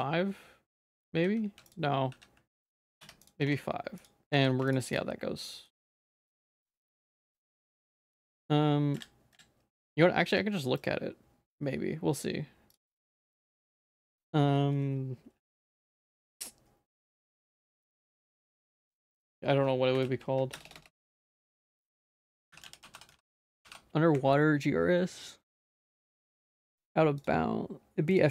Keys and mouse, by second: 1.1 ctrl+z, 1.4 ctrl+z, 4.0 ctrl+z, 4.0 Tab, 4.0 click, 4.0 s, 4.9 click, 5.5 middle click, 5.8 shift+middle click, 6.2 middle click, 6.5 shift+middle click, 7.0 shift+middle click, 7.4 middle click, 7.7 ctrl+s, 7.9 middle click.